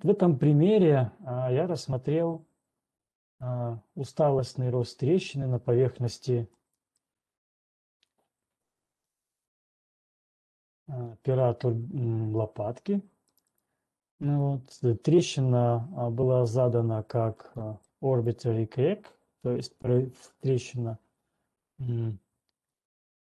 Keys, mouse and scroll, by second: 1.3 middle click, 7.4 middle click, 8.0 right click, 8.4 middle click, 9.4 ctrl+1, 9.9 click, 10.9 click, 13.3 right click, 14.1 right click, 14.9 middle click, 16.9 click, 17.9 middle click.